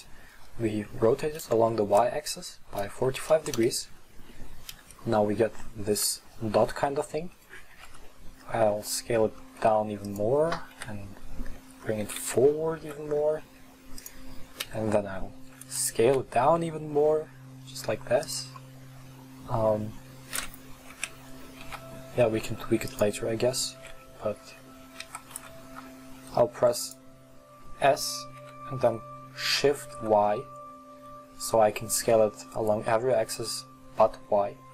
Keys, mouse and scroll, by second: 0.3 right click, 2.0 right click, 4.7 KP_1, 7.8 s, 10.0 right click, 10.7 KP_3, 10.9-12.1 right drag, 12.1 g, 14.2 right click, 14.7 KP_1, 16.1 s, 18.6-21.0 middle drag, 21.0 g, 23.8 s, 28.4 s, 30.2 right click.